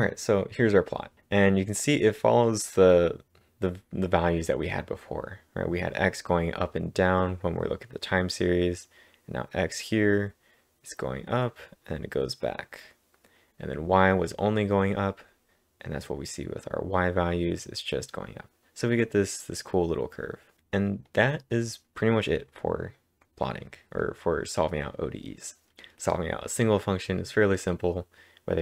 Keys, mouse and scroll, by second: 20.8 click, 21.5-23.4 drag, 24.0 click, 27.8 click, 27.8-28.6 scroll up 5.